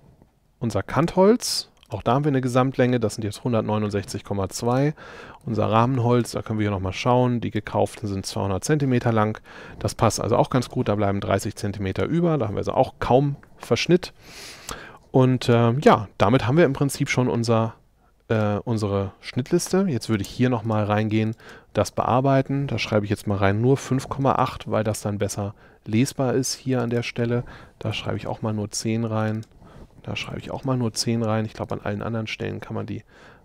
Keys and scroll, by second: 20.2 space, 23.6 5, 28.0 l, 30.3 l.